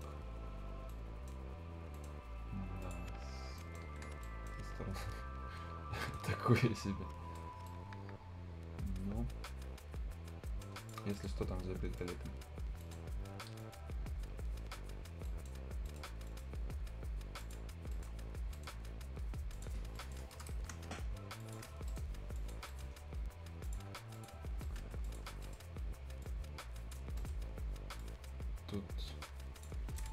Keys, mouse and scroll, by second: 0.2-0.9 shift+scroll up 1, 0.9 shift+right click, 1.7 shift+scroll up 1, 1.9 shift+right click, 2.8 shift+click, 3.1 shift+scroll down 1, 3.4 shift+scroll up 1, 3.6 shift+right click, 3.8 shift+scroll down 2, 3.9 shift+Escape, 4.1 shift+Escape, 4.2 shift+right click, 4.6 shift+scroll up 1, 5.0 shift+right click, 6.2 shift+scroll down 1, 6.5-6.8 shift+scroll up 1, 6.8 shift+right click, 7.5 shift+scroll up 1, 7.7-10.8 shift+right drag, 11.0 shift+scroll up 1, 11.1 shift+right click, 11.4 shift+scroll down 1, 11.6-12.0 shift+scroll up 1, 12.0 shift+click, 12.5 shift+scroll down 1, 12.7 shift+scroll up 1, 12.8 shift+right click, 13.0 shift+scroll down 1, 13.2-13.5 shift+scroll up 1, 13.6 shift+middle click, 15.3 shift+right click, 15.6-17.4 shift+scroll up 3, 15.9 shift+right click, 16.3 shift+middle click, 17.4 shift+click, 17.7 shift+scroll up 1, 17.9 shift+right click, 18.1 shift+scroll down 1, 18.3 shift+scroll up 1, 18.5 shift+right click, 19.5 shift+click, 19.8 shift+scroll down 1, 20.0 shift+right click, 20.4 shift+Return, 20.6-21.2 shift+scroll up 1, 21.4 shift+click, 21.9 right click, 22.1 scroll up 1, 22.4 click, 22.7 right click, 23.6 click, 23.9 scroll up 1, 24.1 click, 24.4 scroll down 1, 24.6 right click, 24.8 Escape, 25.0 click, 25.3-26.2 scroll up 2, 25.4 right click, 26.2 click, 27.1 scroll down 1, 27.2 right click, 28.0-30.0 drag.